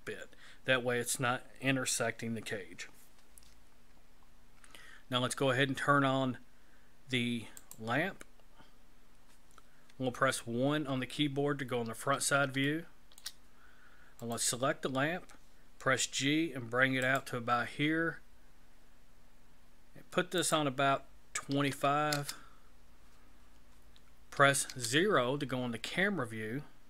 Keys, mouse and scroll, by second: 7.6 click, 10.6 KP_1, 12.7 shift+middle click, 14.2 right click, 15.8 g, 20.4 click, 24.6 KP_0.